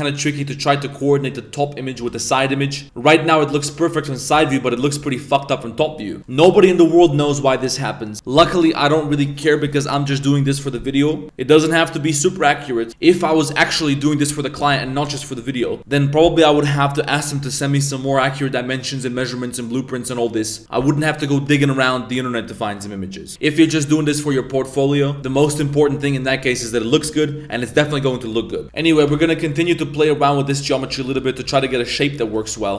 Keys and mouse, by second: 2.0 KP_3, 2.8 Tab, 3.6 shift+middle drag, 4.3 KP_7, 4.8 Tab, 6.2 middle click, 20.1 middle click, 28.6 z, 28.6 s, 28.6 a, 28.9 g, 31.0 shift+middle click, 31.3-32.7 typing, 32.4 shift+middle click.